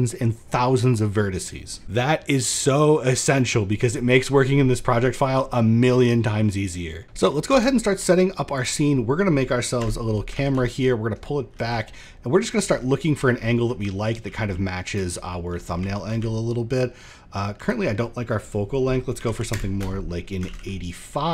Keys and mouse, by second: 3.6-4.9 middle drag, 5.1-5.5 middle drag, 7.0 shift+middle click, 7.1 shift+a, 9.3 KP_0, 9.9 shift+f, 10.1-12.3 shift+middle drag, 14.4 click, 14.6 middle click, 15.6 middle click, 16.2 middle click, 17.9-19.1 drag, 20.0 shift+f, 20.6 shift+click.